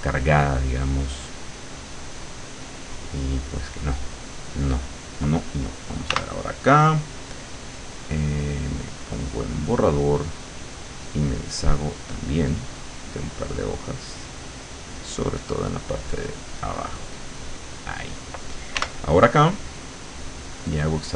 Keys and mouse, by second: 0.1 click, 1.7 click, 6.2 w, 7.7 click, 10.5 click, 11.5 click, 13.1 click, 15.0 click, 15.5 click, 16.4-17.6 drag, 18.8 w, 20.0 click, 20.8-21.1 drag.